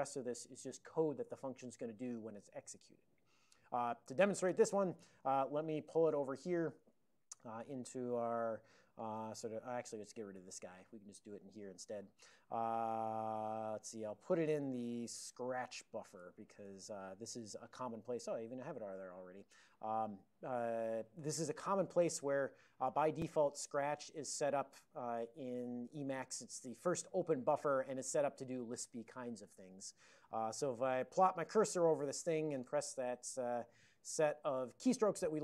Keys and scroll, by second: 5.2 ctrl+a, 5.5 ctrl+p, 5.7 ctrl+p, 6.0 ctrl+space, 6.0 ctrl+n, 6.2 ctrl+n, 6.4 ctrl+n, 6.5 ctrl+n, 6.8 alt+w, 10.5 super+[, 14.6 alt+o, 15.0-17.0 typing.